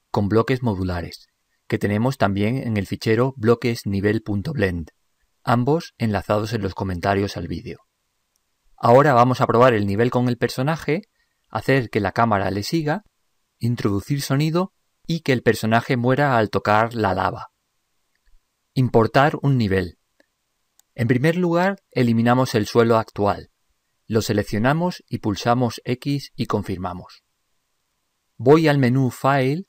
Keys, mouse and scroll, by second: 24.2-26.0 right drag, 26.1 x.